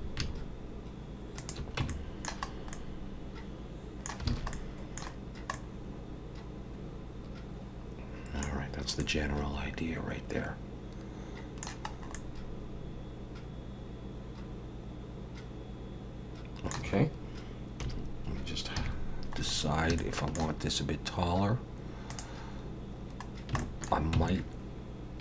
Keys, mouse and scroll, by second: 1.8 Tab, 1.9 middle click, 2.5 scroll up 2, 2.7 middle click, 4.3 alt+a, 4.5 middle click, 5.1 scroll down 2, 5.5 middle click, 8.6-9.0 scroll down 2, 9.0 middle click, 11.9 scroll up 2, 12.1 middle click, 17.8 KP_1, 18.8 KP_3, 19.4 scroll up 4, 20.0 shift+middle click, 22.1 click, 23.3 scroll down 2, 23.6 shift+middle click, 24.2 Tab.